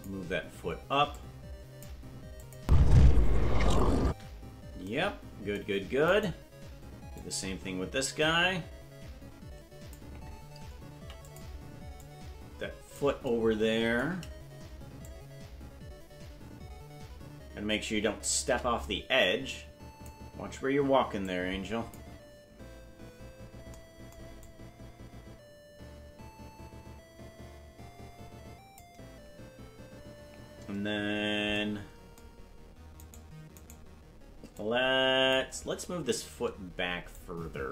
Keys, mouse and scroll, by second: 1.1 click, 2.4 click, 2.6 space, 4.1 space, 6.1 right click, 7.1-10.0 drag, 12.0-13.0 drag, 15.0-18.3 shift+drag, 19.2 click, 21.2 click, 24.4-28.8 drag, 33.0 right click, 34.5 click, 37.1-37.7 shift+drag.